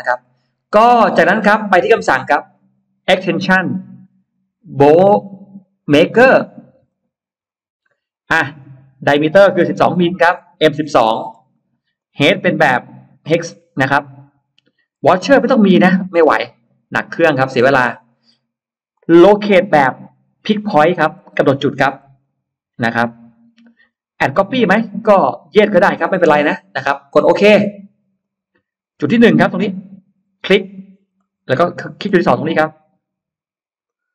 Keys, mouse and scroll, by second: 1.5 middle click, 2.9 click, 6.7 click, 8.4 click, 9.7-11.2 typing, 11.8 click, 13.4 click, 14.9 click, 15.9 click, 18.8 click, 22.0 click, 28.0 click, 30.2 click, 31.0 middle click, 33.7 click.